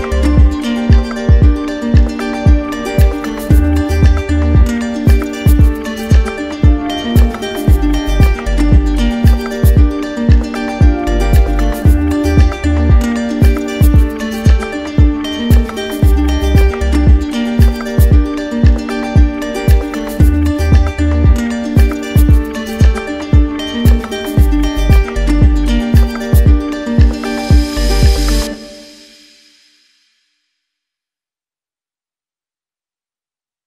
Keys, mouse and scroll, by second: 3.7 click, 4.7 alt+click, 6.1 click, 15.8-16.9 drag, 24.0-25.0 drag, 27.7 click, 28.2 click, 28.9 alt+click, 31.5 click, 32.2 alt+click, 33.4 right click.